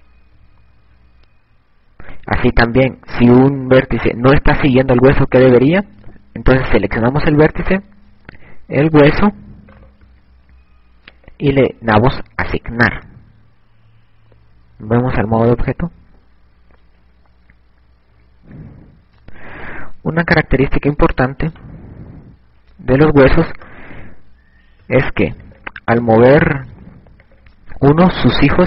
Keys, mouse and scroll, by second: 0.6 KP_Subtract, 4.0 a, 10.6 right click, 12.2 click, 14.4 Tab, 16.5 z, 17.9 KP_Subtract, 19.7 KP_Subtract, 20.0 KP_Subtract, 20.2 KP_Subtract, 20.5 KP_Subtract, 21.2 a, 22.8 right click, 25.0 right click, 26.6 click, 27.3 click.